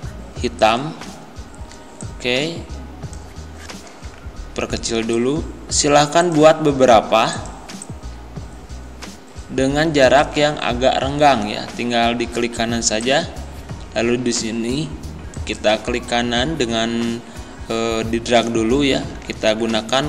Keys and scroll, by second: 19.0 ctrl+d.